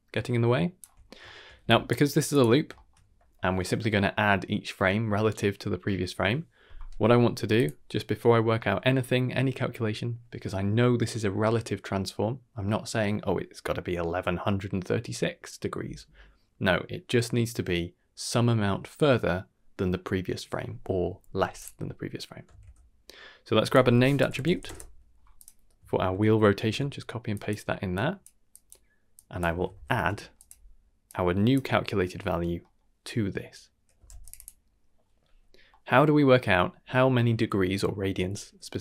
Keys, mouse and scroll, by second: 1.0 scroll down 1, 1.2 shift+middle click, 1.6 click, 2.1 g, 2.7 shift+middle click, 7.1 middle click, 7.5 click, 8.4 middle click, 21.5 click, 22.4 shift+a, 26.1 ctrl+c, 26.6 ctrl+v, 27.3 click, 27.9 click, 28.5 click, 29.1-30.4 drag, 30.3 d, 31.0-31.5 drag, 32.6 middle click, 33.9 a, 34.0 g, 34.3 click, 35.7 middle click, 36.2 middle click.